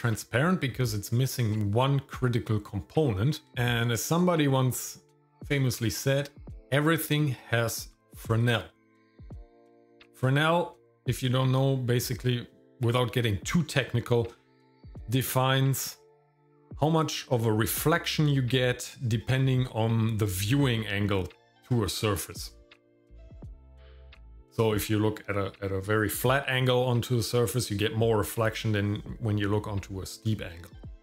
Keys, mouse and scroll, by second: 0.0 scroll up 1, 3.0 scroll down 1, 3.5 shift+middle click, 3.5 ctrl+click, 5.9 scroll up 2, 7.5 click, 8.4 click, 9.8 middle click, 23.5 scroll down 2.